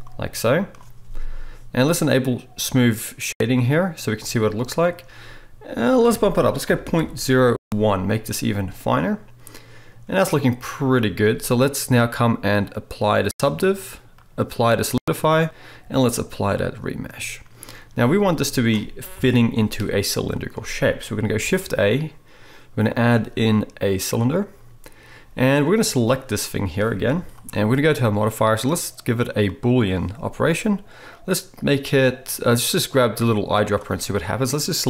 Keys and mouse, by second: 3.4-5.8 right drag, 8.9-10.8 middle drag, 17.6 click, 17.6 middle click, 17.6 right click, 19.1 KP_7, 21.3-25.8 shift+drag, 21.3-25.8 shift+middle drag, 21.3-27.4 shift+right drag, 21.4 shift+a, 27.1 g, 27.4 middle click, 28.0-33.6 drag, 33.6-34.8 middle drag.